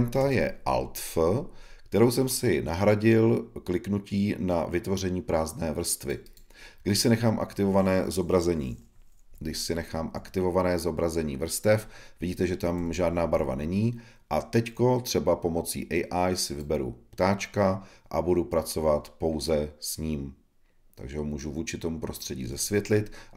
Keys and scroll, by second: 0.1 super+f.